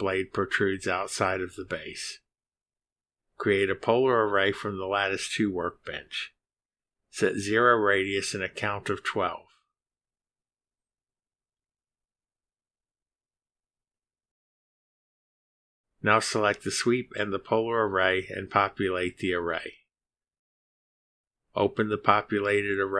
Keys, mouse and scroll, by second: 0.0 click, 0.6 middle click, 1.3 scroll down 1, 7.0 click, 8.1 click, 8.7 scroll down 1, 9.1 click, 10.1 0, 11.1 click, 11.6 scroll down 1, 12.8 click, 13.8-14.7 typing, 15.5 click, 17.7 click, 18.4 ctrl+click, 20.6 click.